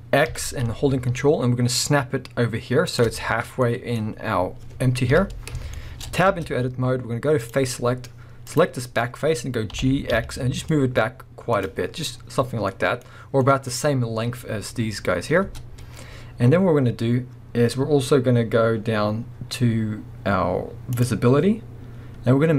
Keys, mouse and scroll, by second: 3.6-6.3 middle drag, 5.1 KP_1, 7.4 click, 7.7 middle click, 8.5 click, 8.8-9.7 scroll down 1, 11.7 click, 11.8-12.7 scroll down 1, 12.7 middle click, 13.0-13.4 scroll up 1, 13.4 middle click, 15.4 Tab, 18.7-20.9 scroll down 1, 20.9-22.5 drag.